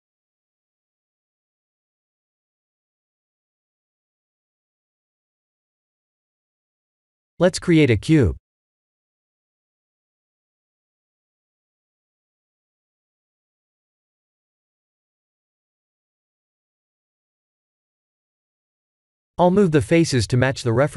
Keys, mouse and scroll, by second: 0.0 shift+middle click, 1.5 shift+middle click, 3.5 click, 4.5 shift+d, 7.4 click, 8.1 shift+a, 13.2 g, 17.2 shift+z, 17.7 scroll up 2, 20.5 Tab.